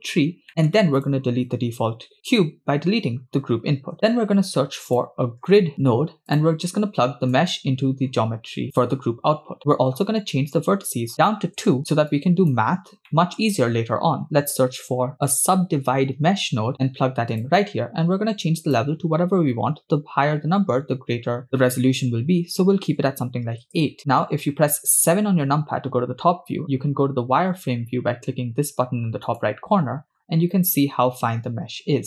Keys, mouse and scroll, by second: 0.0-0.4 scroll up 5, 0.5 middle click, 1.0 click, 2.9 x, 4.1 shift+a, 7.3-8.8 drag, 9.8-10.1 scroll up 3, 10.6-11.6 shift+drag, 12.1-12.6 drag, 12.9 scroll down 2, 13.1-13.4 middle drag, 13.7 shift+a, 18.6-23.8 drag, 25.2 KP_7, 26.4-26.9 scroll up 5, 29.4 click, 30.2-30.6 scroll up 5, 31.4 scroll up 2.